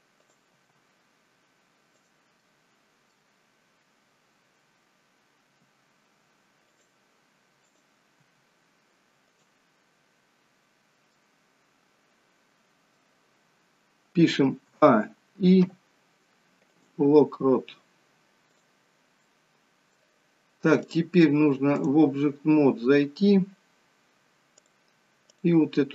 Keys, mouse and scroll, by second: 0.3 click, 0.6 g, 2.4 middle click, 5.6 r, 7.8 click, 8.2 r, 11.3 middle click, 14.6 a, 15.6 i, 18.4 click, 19.2 middle click, 21.0 click, 24.5 click, 25.3 click.